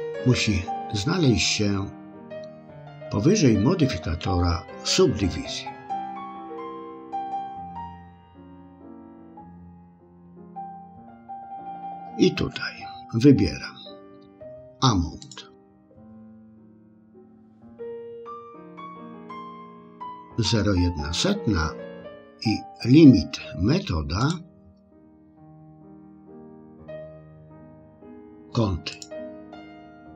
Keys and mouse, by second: 6.3 click, 7.9 click, 9.5 click, 15.4-24.3 drag, 25.2-29.1 drag.